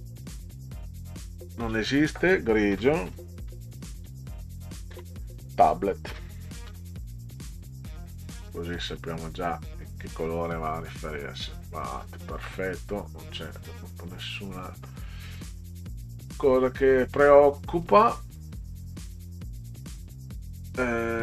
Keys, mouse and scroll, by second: 0.3 click, 3.1-5.1 typing, 6.5-8.7 typing, 9.4 click, 16.1 click, 17.7 click, 19.6 click.